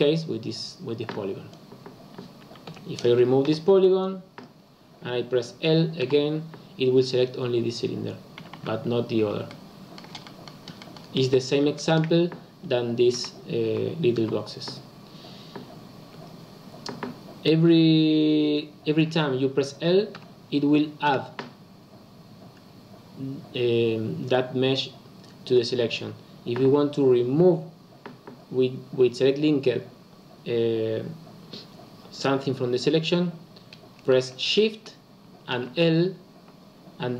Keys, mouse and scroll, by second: 2.7 3, 2.9 click, 3.4 x, 6.0 l, 8.3 a, 8.5 a, 9.4-11.4 shift+middle drag, 11.4 scroll down 2, 11.7-13.1 shift+middle drag, 13.1 l, 13.6 l, 14.1 l, 20.1 l, 21.0 l, 35.4 shift+l, 36.9 shift+l.